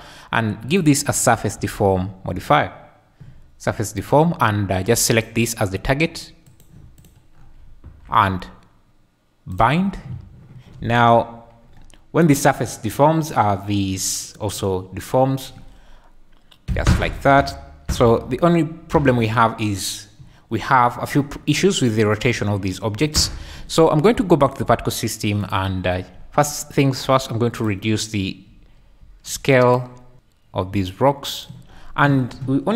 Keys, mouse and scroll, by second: 0.7-4.2 drag, 5.1 click, 6.5 click, 9.5 click, 10.8 space, 16.8 Escape, 17.1-19.1 typing, 17.8 Escape, 23.0 Escape, 24.4 click, 27.6 click, 30.1-31.4 shift+drag.